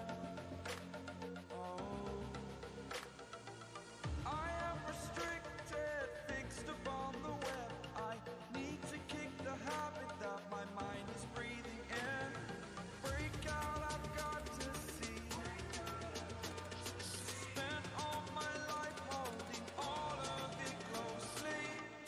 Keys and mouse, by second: 0.2-2.0 alt+shift+click, 1.8 space, 3.4-5.3 drag, 18.4 ctrl+space, 18.8-19.4 ctrl+click, 18.9 ctrl+space, 19.4 space, 19.6 click, 20.1-20.9 space.